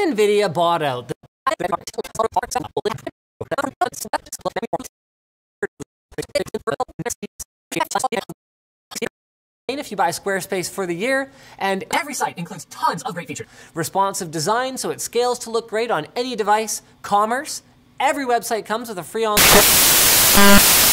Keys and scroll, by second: 1.1 space, 9.3 space, 11.7 d, 13.3 a.